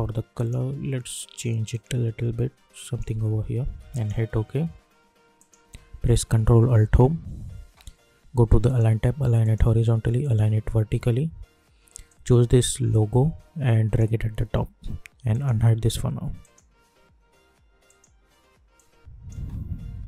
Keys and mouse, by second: 6.8 ctrl+alt+Home, 8.6-19.3 drag, 19.3 space.